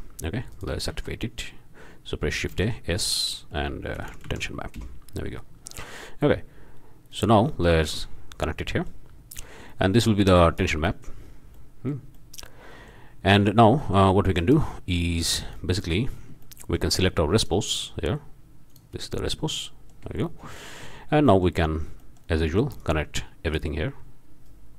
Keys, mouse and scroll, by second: 0.5 shift+drag, 0.9 shift+a, 2.5 s, 4.0 t, 4.0 e, 4.3 s, 4.7 Return, 7.1-7.9 scroll up 4, 8.3 scroll down 2, 8.6-9.1 middle drag, 9.7-10.1 middle drag, 10.3-10.7 drag, 10.9 middle click, 11.5 middle click, 11.7 click, 12.1 click, 13.8-14.1 drag, 14.4 click, 14.9-15.5 scroll down 1, 15.6-16.0 shift+drag, 16.0-16.4 shift+scroll up 1, 16.5 shift+click, 17.4 click, 18.7 click, 19.6 shift+click, 20.3 shift+middle click, 20.6 shift+click, 21.0 shift+scroll down 2, 21.4 shift+middle drag, 21.7 middle click, 22.0-22.4 drag, 22.8-23.7 drag, 24.4-24.7 drag.